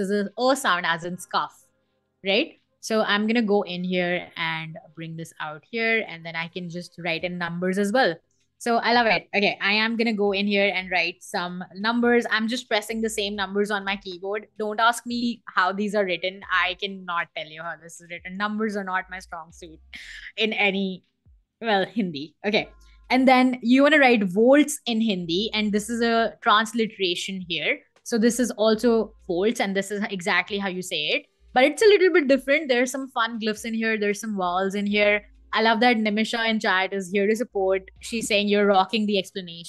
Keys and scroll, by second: 9.4-13.1 typing, 15.2 Escape, 35.4 Escape.